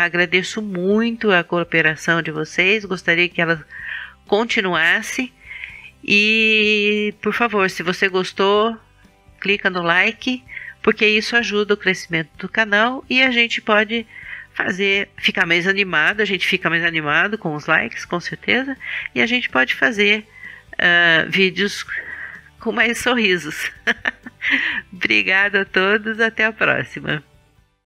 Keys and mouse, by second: 24.0 super+middle click.